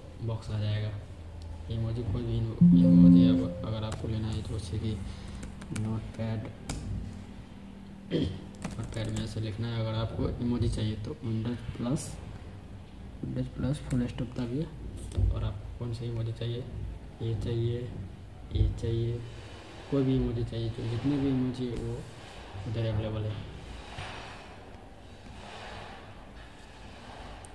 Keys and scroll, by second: 4.9-6.1 typing, 6.5 Return, 7.7-9.3 typing, 10.8 typing, 13.8 super+., 14.1 typing, 15.6 typing.